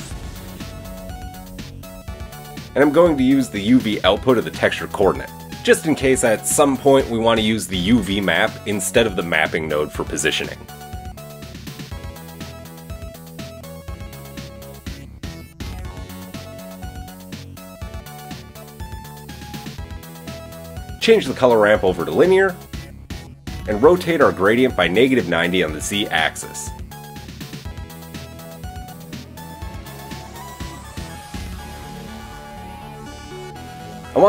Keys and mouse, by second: 0.0 Delete, 0.8-10.4 drag, 10.4 middle click, 10.7-18.6 drag, 18.6-20.9 middle drag, 20.9-28.2 drag, 28.2 middle click, 28.8-31.5 drag, 31.5 middle click, 31.7-34.2 drag.